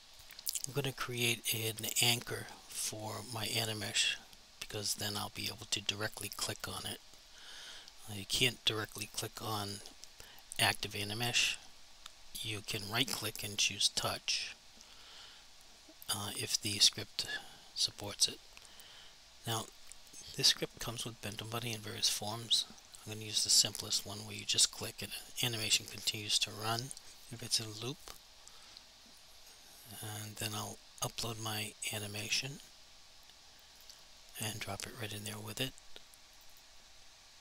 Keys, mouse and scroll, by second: 2.0 double click, 13.1 right click, 19.6 click, 23.1 click, 31.2 click, 36.5 double click.